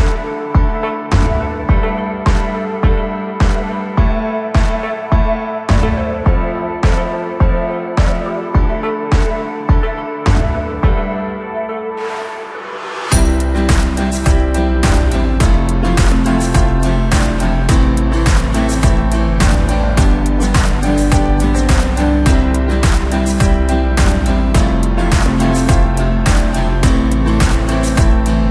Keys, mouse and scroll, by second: 0.1 3, 1.0 click, 2.3 Tab, 2.8-3.7 middle drag, 3.7 KP_7, 4.6-5.5 scroll up 1, 5.5 s, 7.9 KP_1, 8.9 scroll down 2, 9.1-9.8 middle drag, 9.8-10.7 scroll up 1, 10.7 KP_1, 13.4 g, 19.3-20.0 drag, 20.0-22.6 middle drag, 22.6 KP_1, 24.2-24.7 drag, 24.7 Tab, 26.3 click, 26.7-27.1 scroll down 1, 27.1 1, 28.0 click.